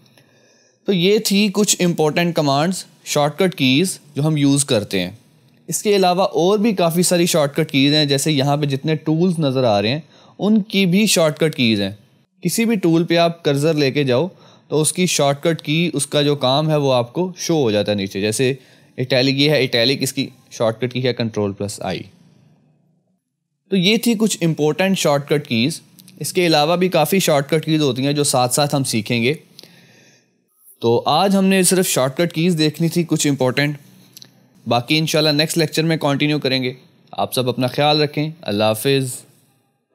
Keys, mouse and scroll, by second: 1.2-3.0 scroll up 1, 12.2 F1, 16.0 click.